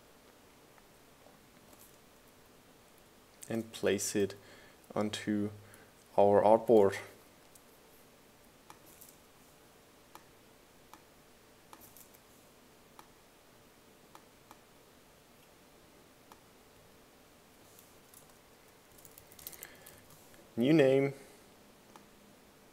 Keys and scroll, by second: 2.8 shift+Left, 3.4 shift+Right, 3.9 shift+Left, 5.4 Down, 9.8 BackSpace, 12.8 BackSpace, 19.4-21.3 typing.